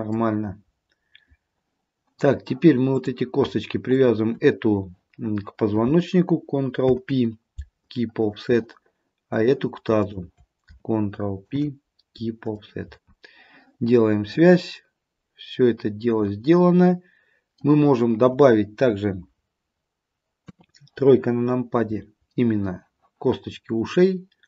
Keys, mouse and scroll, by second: 3.0 click, 4.0 shift+click, 6.9 ctrl+p, 9.4 click, 10.1 shift+click, 11.5 ctrl+p, 16.6 middle click, 17.4 middle click, 20.7 KP_3.